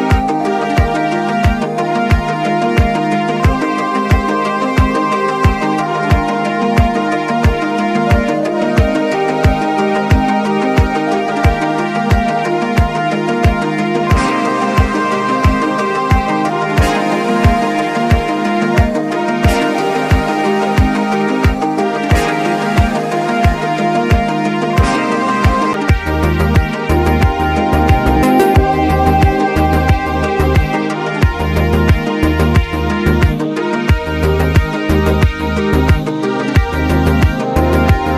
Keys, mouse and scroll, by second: 2.7 click, 4.2 ctrl+z, 4.7-6.0 drag, 6.0-8.0 drag, 7.1 typing, 8.0-11.0 alt+drag, 11.2-16.2 drag, 16.4 click, 17.0 alt+scroll down 1, 18.5-19.9 drag, 19.9-22.9 drag, 23.0 click, 23.1-25.2 alt+drag, 26.5-28.0 drag, 28.8 alt+scroll down 1, 29.2 click, 30.6 ctrl+scroll down 1, 31.7 click, 32.4 alt+scroll up 1, 33.1-34.7 drag, 34.7-36.2 alt+drag, 36.2 ctrl+z, 36.6-37.7 drag, 37.7 alt+scroll down 1.